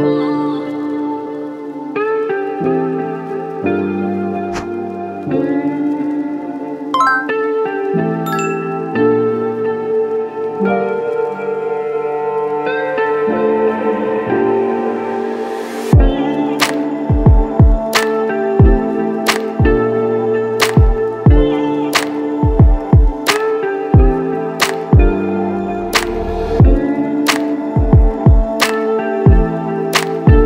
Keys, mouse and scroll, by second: 1.8 Delete, 1.9 Delete, 2.9 7, 3.0 KP_7, 4.7 shift+a, 4.7 shift+a, 7.7 KP_Add, 8.0 KP_Add, 9.5 s, 9.6 s, 12.1 Return, 12.3 KP_Subtract, 12.4 KP_Subtract, 12.5 KP_Subtract, 12.7 KP_Subtract, 12.9 KP_Add, 13.3 Tab, 13.4 Tab, 16.9 e, 17.0 e, 19.6 Escape, 20.6 s, 20.6 s, 28.1 Return, 28.6 KP_Add, 30.4 -.